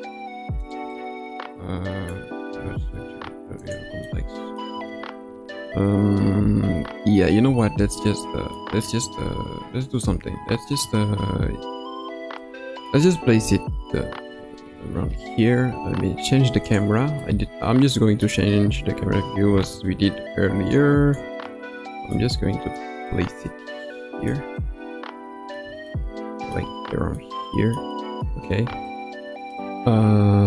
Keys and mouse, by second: 0.9-2.1 middle drag, 2.5 g, 4.0-4.6 middle drag, 4.7 Tab, 5.2 Tab, 6.6 Tab, 7.4 Tab, 7.9-8.6 middle drag, 9.1-10.9 middle drag, 12.5-12.9 middle drag, 13.4 KP_0, 16.6 click, 17.2-18.2 middle drag, 19.7-21.1 shift+middle drag, 21.5-22.1 middle drag, 22.3-22.7 shift+middle drag, 23.0-24.3 shift+middle drag, 24.5-25.6 middle drag, 25.8-26.5 shift+middle drag, 27.2-27.7 middle drag, 27.9 middle click, 28.9-29.5 shift+middle drag.